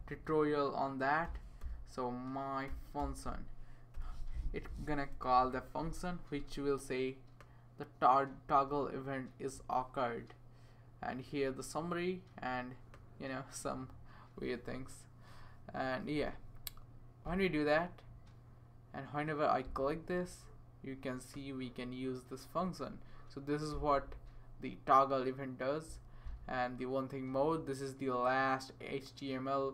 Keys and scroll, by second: 0.0-3.7 typing, 3.9 Return, 5.1 typing.